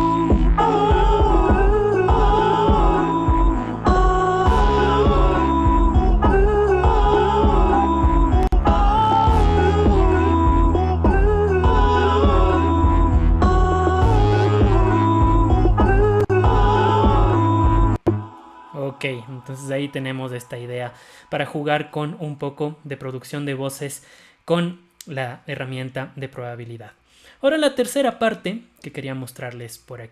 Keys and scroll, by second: 8.2 BackSpace.